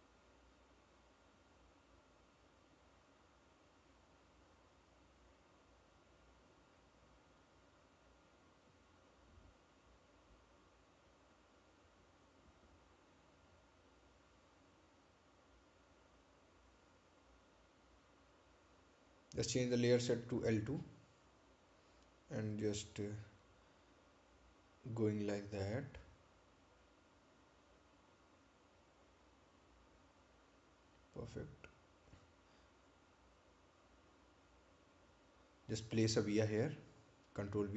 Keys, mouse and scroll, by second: 3.9 scroll up 1, 20.1 click, 30.1 click, 34.1 click, 35.5-36.8 scroll up 1, 36.8 right click.